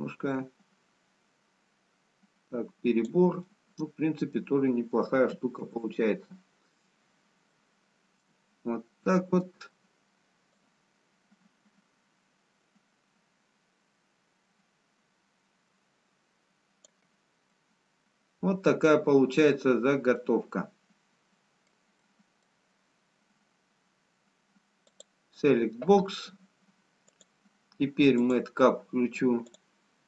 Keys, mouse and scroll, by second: 1.7 click, 3.4 middle click, 6.1 ctrl+z, 8.0 middle click, 9.7 middle click, 11.5 click, 19.3 middle click, 20.5 middle click, 22.2 middle click, 24.9 click, 27.4 click.